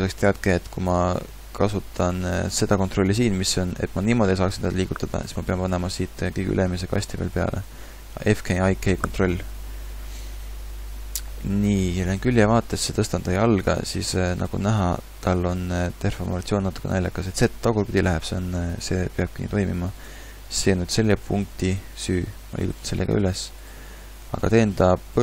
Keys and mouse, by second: 3.4 g, 12.2 KP_3, 12.9 g, 14.7 r, 15.5 g, 21.1 g, 23.9 g.